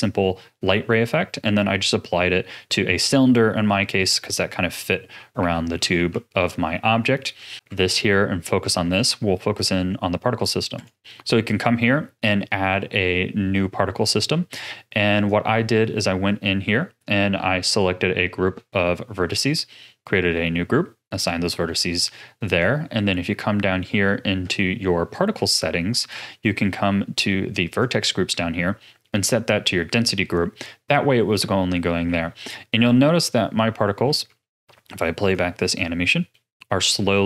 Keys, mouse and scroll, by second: 0.0 ctrl+space, 5.4 a, 6.1 ctrl+s, 6.7-7.5 middle drag, 7.5 KP_Divide, 8.0-16.2 shift+middle drag, 16.2 Tab, 17.7-32.0 drag, 32.0 a, 34.2 Tab, 35.3-36.3 drag, 36.3-37.2 middle drag.